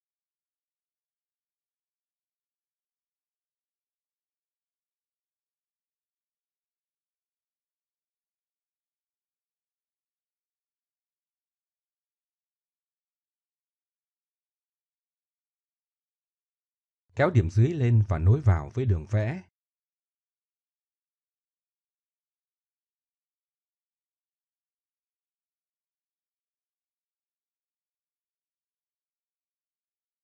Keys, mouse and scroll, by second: 0.4 w, 0.9 ctrl+z, 4.0 click, 4.3 middle click, 5.0 w, 5.8 w, 7.8 middle click, 9.3 middle click, 9.3 click, 9.5 middle click, 10.3 middle click, 10.7 middle click, 10.7 click, 11.1 click, 11.9 middle click, 12.5 middle click, 13.6 click, 14.4-14.9 drag, 15.9-16.6 drag, 17.1-18.4 drag, 20.0 click, 20.1 middle click, 21.6 middle drag, 21.9-22.5 drag, 22.5 middle click, 23.3 middle click, 23.5 click, 24.1 alt+m, 27.2-28.3 middle drag.